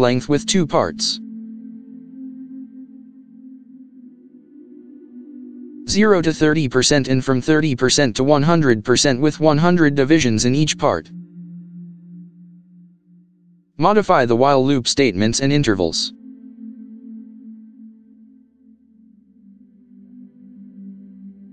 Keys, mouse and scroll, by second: 1.0 ctrl+v, 16.0 KP_0, 16.1 KP_Decimal, 18.6 BackSpace, 20.8 BackSpace.